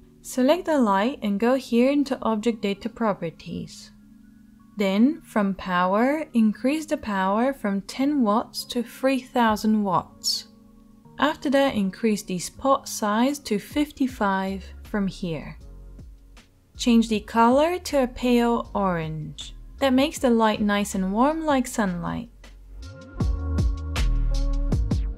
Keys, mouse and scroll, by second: 7.8 0, 15.4 5, 18.3-25.1 drag.